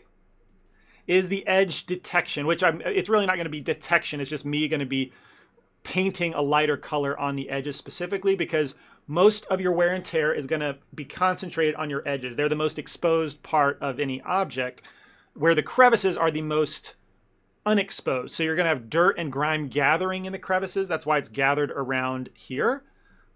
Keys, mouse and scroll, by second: 1.4 ctrl+middle click, 1.7 middle click, 2.3 f, 15.3 ctrl+middle click, 21.9 middle click.